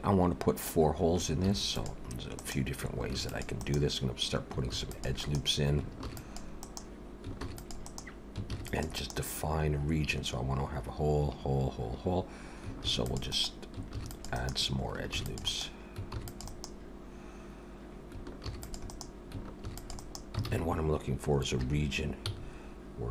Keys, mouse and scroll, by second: 1.4 ctrl+r, 3.1 ctrl+r, 4.7 ctrl+r, 6.0 ctrl+r, 7.4 ctrl+r, 8.5 ctrl+r, 12.8 ctrl+r, 13.9 ctrl+r, 15.1 ctrl+r, 16.1 ctrl+r, 18.4 ctrl+r, 19.6 ctrl+r, 20.5 alt+a, 21.6 3, 22.3 c.